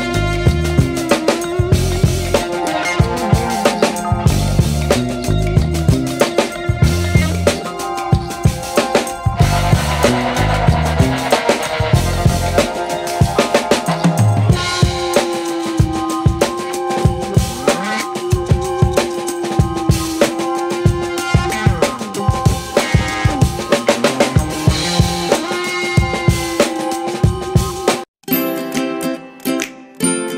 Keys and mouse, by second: 0.4 alt+z, 0.8 right click, 0.9 c, 1.6 alt+z, 1.9 g, 2.9 alt+z, 3.2 shift+middle click, 3.7 middle click, 4.9 KP_1, 5.5 alt+z, 5.9 g, 8.9 right click, 9.1 g, 9.6 alt+z, 9.8 KP_3, 10.8 alt+z, 11.1 right click, 11.3 g, 12.4 g, 13.6-14.8 right drag, 13.7 g, 15.1 right click, 15.3 g, 16.5 g, 17.8-19.7 right drag, 19.7 g, 20.7 right click, 20.9 g, 21.5 right click, 21.8 shift+right click, 23.7 right click, 23.7 g, 23.9 c, 24.8 g, 26.4 shift+middle click, 27.0 right click, 27.2 g, 28.2 right click, 29.5 g.